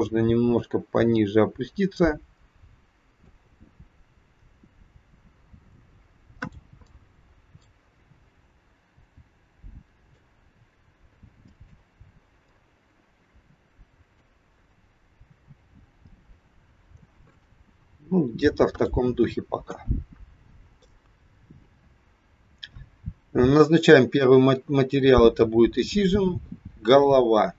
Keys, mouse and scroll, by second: 6.8 middle click, 9.0 c, 19.6 KP_1, 20.0-20.3 scroll down 2, 20.7 shift+middle click, 25.7 click.